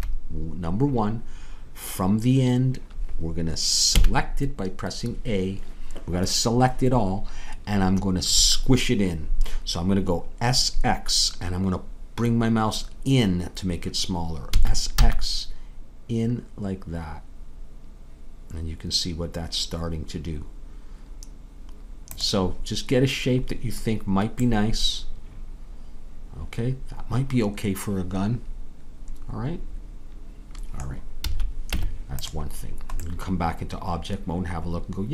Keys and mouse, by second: 4.0 a, 14.5 s, 25.9-27.8 middle drag, 31.2 a, 31.7 Tab.